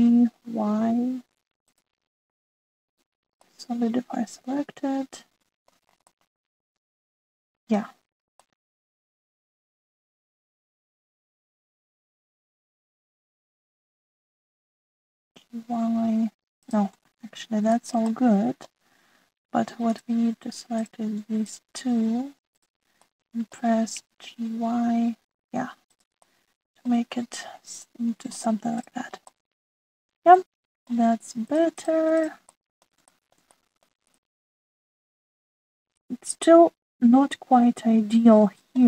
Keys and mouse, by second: 0.5 g, 3.8 middle click, 4.4-6.7 middle drag, 7.1-8.7 middle drag, 9.4 middle click, 10.7 s, 12.3 click, 12.9 middle click, 13.3 click, 14.4 shift+click, 15.2 ctrl+z, 16.2 g, 18.0 ctrl+z, 18.6 shift+middle click, 19.1 middle click, 20.8 middle click, 21.7 click, 22.4 shift+click, 23.5 click, 24.0 middle click, 24.9 g, 27.1 click, 30.3-32.0 middle drag, 32.5 click, 33.5-33.8 middle drag, 34.0 shift+middle click, 34.5 middle click, 35.8-38.8 middle drag.